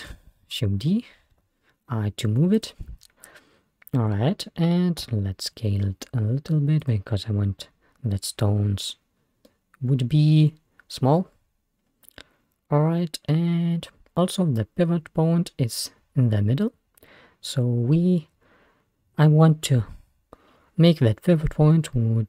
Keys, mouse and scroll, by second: 0.1 shift+d, 3.6-4.1 scroll up 1, 4.1-5.0 scroll down 1, 5.0 s, 7.4-8.9 scroll up 2, 9.1-9.5 scroll down 2, 9.5-12.3 middle drag, 14.3-14.8 scroll up 2, 15.5-16.2 scroll down 1.